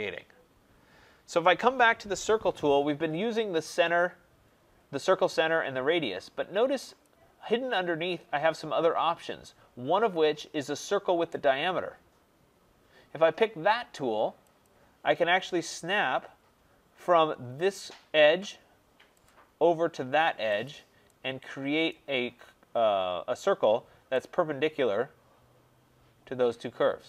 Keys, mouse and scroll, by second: 7.0 click, 14.6 click, 19.2 click, 20.6 click, 21.8 right click, 22.1 middle click, 22.1 middle click, 22.6 middle click, 22.6 middle click, 23.0 middle click.